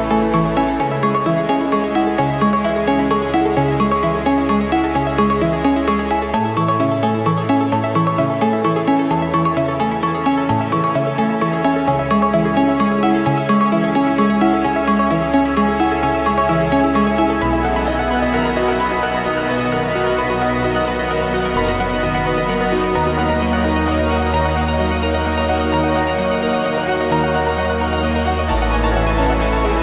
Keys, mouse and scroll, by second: 0.6 0, 1.5 click, 2.7-5.7 drag, 6.5 ctrl+click, 7.3 ctrl+click, 10.0 click, 11.2 click, 12.3 click, 13.0 ctrl+click, 14.6 click, 16.4 ctrl+z, 17.0 ctrl+click, 17.9 click, 19.2 ctrl+click, 20.2 click, 21.3-24.3 drag, 25.2 click, 26.3 click, 29.6 click.